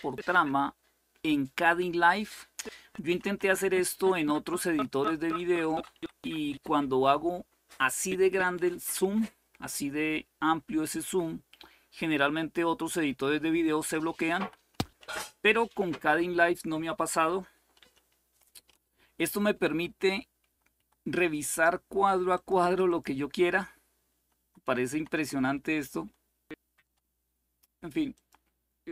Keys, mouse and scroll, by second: 0.0 Left, 2.5 Left, 2.8 Left, 3.0-4.4 Left, 13.9 Left, 14.1 Left, 14.4 Left, 14.6 Left, 17.3 Left, 17.5-28.9 Left, 19.2 Right, 19.4 Right, 20.2 Right, 20.5 Right, 22.1-23.5 drag, 22.1 typing, 23.9-24.6 typing, 25.8 typing, 27.9 click.